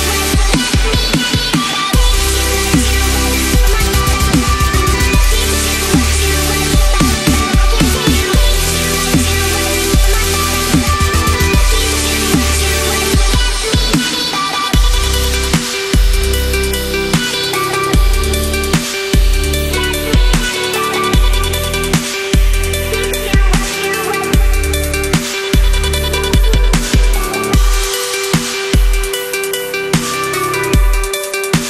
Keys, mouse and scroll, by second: 0.9-4.6 drag, 5.2 space, 5.4 click, 5.5-6.0 space, 6.3 click, 6.5 space, 6.9-9.6 drag, 11.2 space, 11.3 click, 11.5 space, 11.9 click, 12.9 ctrl+click, 18.3-19.5 drag, 22.1-23.3 drag, 24.7 drag, 25.9-26.7 drag, 28.9 ctrl+-, 31.0 click, 31.2 space, 31.6 click.